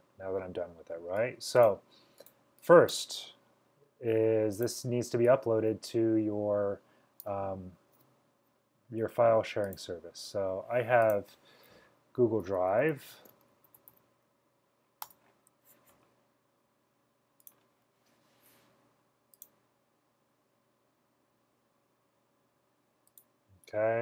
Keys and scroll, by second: 12.4-13.3 typing, 14.7 typing.